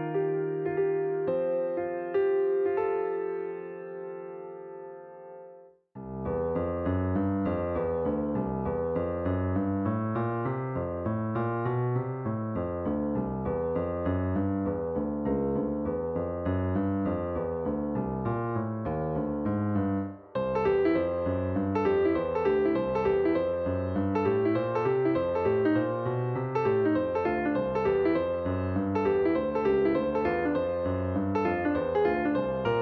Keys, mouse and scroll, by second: 1.4 click, 2.0 click, 2.7-8.0 drag, 9.7-12.1 drag, 13.0 click, 13.5-14.0 scroll up 4, 14.9-17.9 drag, 25.0-32.8 drag.